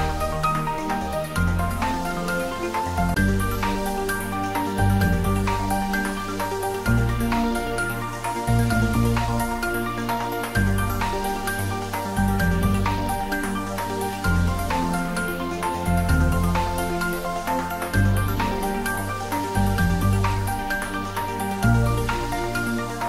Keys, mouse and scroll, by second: 1.6-2.0 scroll up 1, 4.2-5.4 drag, 13.3 click, 17.3 s, 19.0 click, 22.5 `.